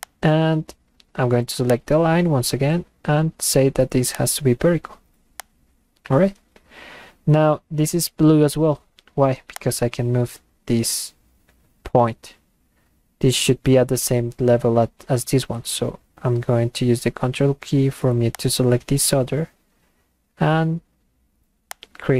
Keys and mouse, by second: 0.0 click, 1.7 click, 4.1 click, 5.4 click, 9.6-14.0 drag, 18.3 ctrl+click, 21.7 click.